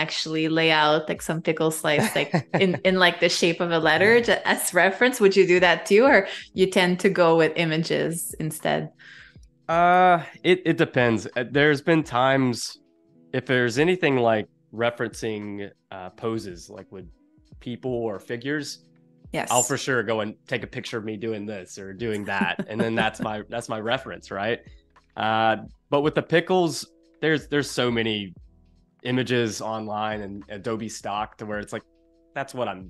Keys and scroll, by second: 8.5 space, 14.2 super+u, 25.9 space.